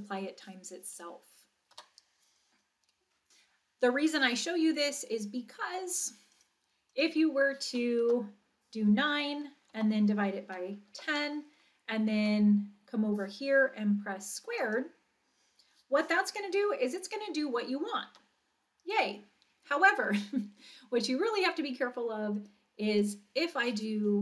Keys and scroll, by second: 1.7 Return, 8.0 Return, 9.1 9, 9.7 Down, 10.4 1, 10.9 0, 12.2 Right, 18.1 Return.